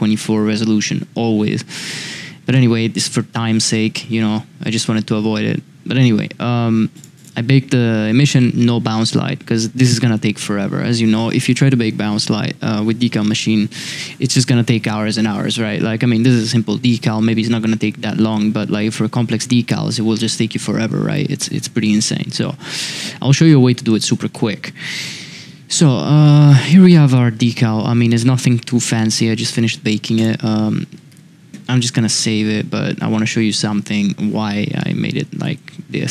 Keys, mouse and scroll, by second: 6.9 click, 7.1 click, 23.6 n, 24.3 shift+middle drag, 25.0-25.7 middle drag, 26.5 g, 31.1 n, 34.8-35.5 middle drag.